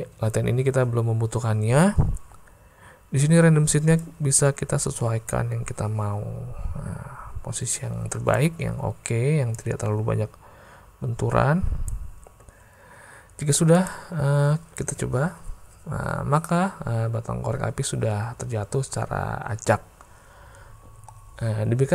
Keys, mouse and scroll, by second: 4.0-8.4 drag, 9.6-11.9 drag, 13.8 click, 14.9 space.